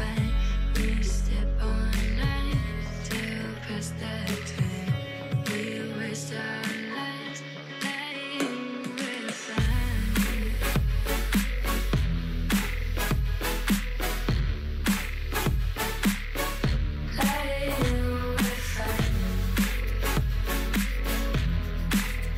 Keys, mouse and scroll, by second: 0.1 middle click, 0.8 KP_3, 1.0 alt+z, 1.3 scroll up 2, 1.6 scroll down 2, 1.8 shift+middle click, 2.1 click, 2.7 scroll up 2, 2.9 shift+a, 4.1-5.1 scroll down 7, 5.5 s, 6.3 g, 6.9-7.4 scroll up 6, 7.4 shift+middle click, 7.7-8.2 scroll up 1, 8.2 g, 11.4 click, 11.7 l, 12.2 h, 13.0 1, 13.1 click, 13.5 g, 15.1 click, 15.5 ctrl+r, 17.5 click, 18.1 g, 20.1 click, 20.4 g, 21.2 click, 21.3 g, 22.0 click.